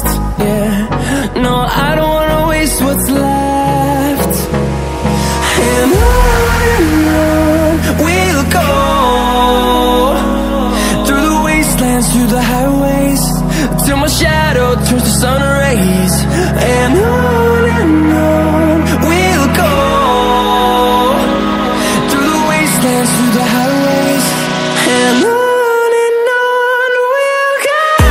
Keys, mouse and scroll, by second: 7.9 click, 12.8-28.0 drag.